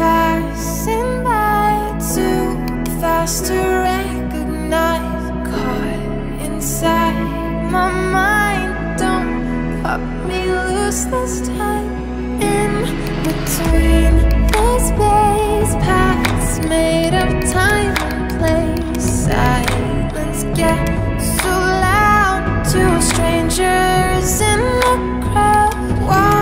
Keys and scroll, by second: 12.1 ], 12.8 ], 14.9 [, 15.8 ], 22.1 [.